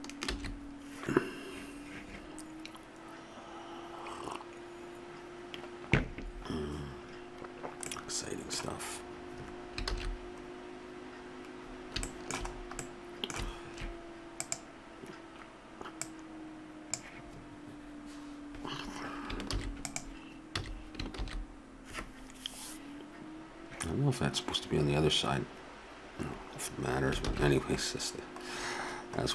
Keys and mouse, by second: 0.6 shift+z, 8.3 middle click, 10.0 middle click, 10.5 shift+z, 14.4 right click, 17.0-18.1 drag, 19.5 ctrl+s, 20.6 a, 21.4 shift+z, 27.5 shift+z.